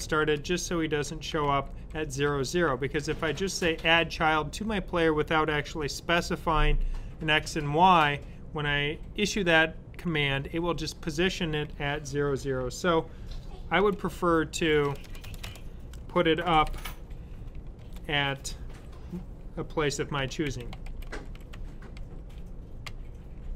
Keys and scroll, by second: 0.0-0.1 typing, 1.2-2.6 typing, 13.2-17.7 typing, 19.8-22.7 typing.